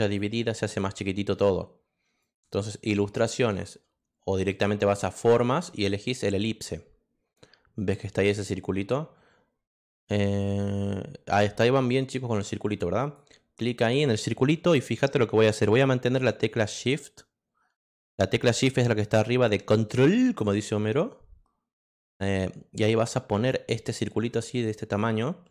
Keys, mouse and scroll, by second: 0.0 click, 2.2 click, 5.0 click, 13.0 click, 16.5-18.9 shift+drag, 19.3-25.5 shift+drag.